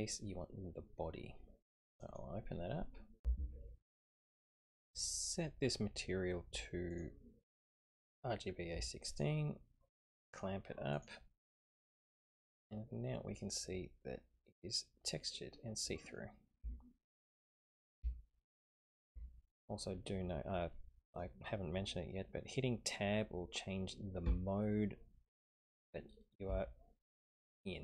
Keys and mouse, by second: 3.3 F10, 7.0-9.3 drag, 10.3 click, 10.9 click, 12.5 click, 13.5-16.2 middle drag, 16.6 Tab, 17.1-17.9 middle drag, 18.1-18.8 shift+middle drag, 19.1 Tab, 20.2-21.3 middle drag, 24.2 Tab, 25.1-25.8 middle drag, 26.6 shift+middle click.